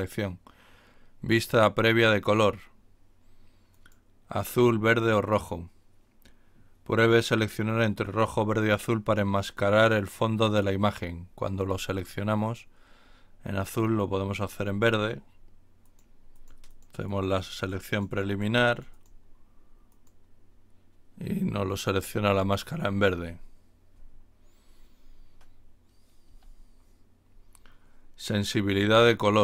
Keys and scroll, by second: 26.2 Escape.